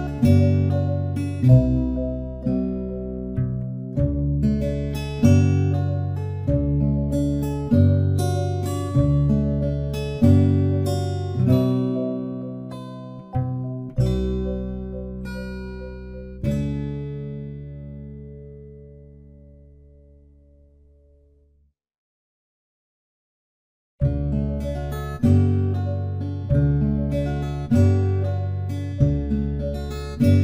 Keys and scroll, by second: 22.3 ctrl+t.